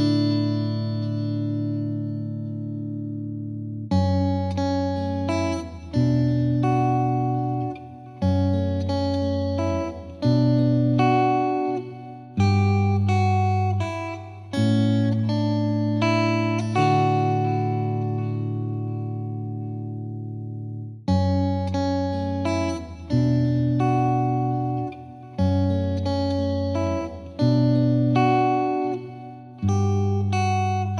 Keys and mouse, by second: 0.3 click, 1.7 F2, 2.0 click, 2.9 click, 3.3 click, 3.9 click, 4.6 click, 5.1 click, 5.6 click, 6.1 click, 7.1 click, 7.5 click, 8.0 click, 8.8 click, 10.3 click, 11.0 click, 11.4 Delete, 12.4 click, 13.8 click, 14.9-16.8 drag, 17.1 click, 17.8 click, 18.5 click, 18.8 click, 21.8 click, 22.3 click, 22.5 ctrl+z, 23.0 ctrl+z, 23.7 click, 24.0 click, 24.6 click, 25.0 click, 25.2 click, 25.6 click, 26.6 click, 27.5 click, 28.2 click, 29.8 click, 30.2 click, 30.6 F3.